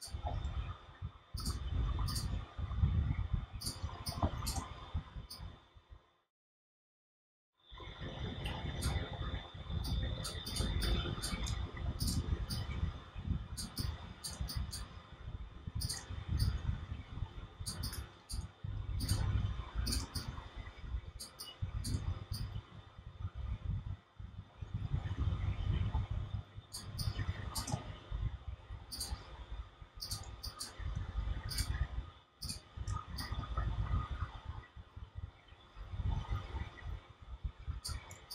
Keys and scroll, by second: 11.4 shift+space.